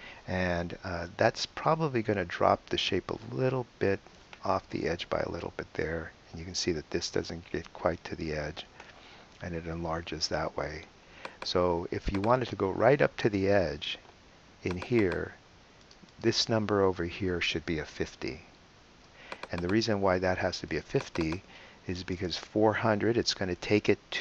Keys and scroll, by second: 17.5 5, 17.7 0.